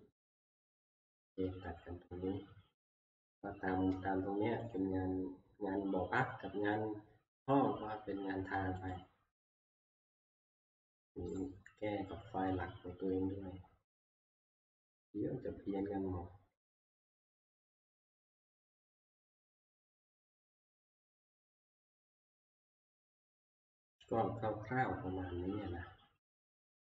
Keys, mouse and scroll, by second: 0.6 Escape, 4.8 click, 9.0 click, 11.4-13.9 drag, 14.1-16.4 right drag, 17.3 click, 17.3 right click, 23.9 click.